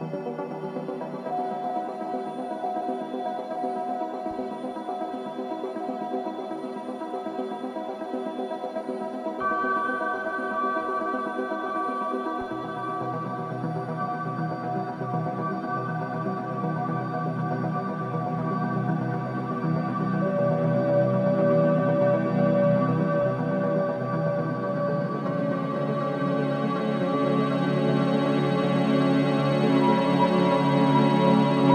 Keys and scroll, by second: 7.5 ], 10.9 ], 11.7 ], 23.4 4, 28.4 3, 29.0 ], 30.1 4.